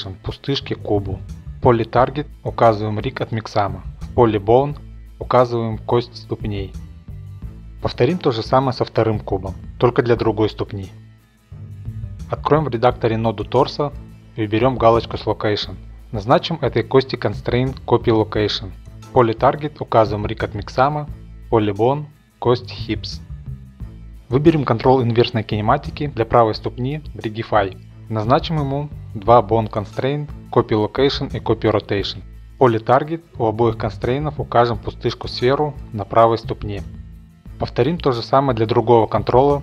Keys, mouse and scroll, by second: 1.3 typing, 2.7 click, 3.5 click, 5.0 typing, 6.5 click, 6.9 click, 7.4 click, 7.5 click, 7.6 click, 7.9 click, 8.1 click, 8.8 click, 9.3-10.8 typing, 10.0-10.6 drag, 10.8 click, 11.2 middle click, 11.3-12.4 drag, 12.4 middle drag, 12.5-13.4 drag, 13.6 scroll, 13.9 shift+middle click, 14.8 click, 15.0 ctrl+Tab, 15.3 click, 16.3 click, 20.7 middle click, 21.1 middle click, 21.4 middle click, 23.1 click, 23.6 shift+middle click, 23.8 middle click, 24.3 middle click, 24.8 shift+middle click, 25.3 click, 26.8 click, 27.9 click, 28.5 click, 28.8 click, 29.8 shift+middle click, 30.6 click, 31.8-35.6 drag, 35.6-36.8 middle drag, 36.8-37.1 drag, 37.1-37.8 middle drag, 37.8 scroll, 38.3-39.6 drag.